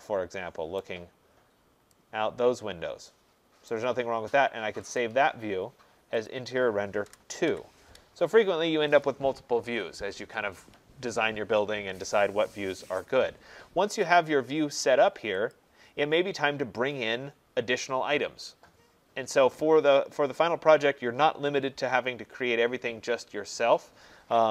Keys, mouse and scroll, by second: 0.8 right click, 1.5 middle click, 3.7 right click, 5.0 click, 9.0 click, 15.5 click.